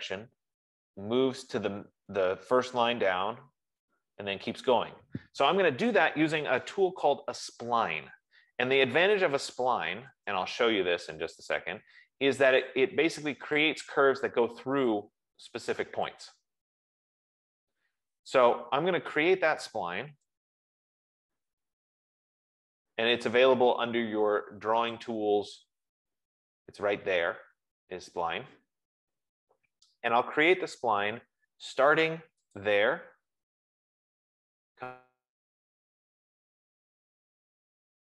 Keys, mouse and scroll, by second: 3.0 F15, 4.8-9.8 middle drag, 9.4-10.8 typing, 13.1 click, 13.9 click, 15.4 click, 16.6 click, 18.1 Escape, 19.9-21.3 typing, 25.6 click, 30.2-31.4 scroll, 32.8 click, 33.6 scroll.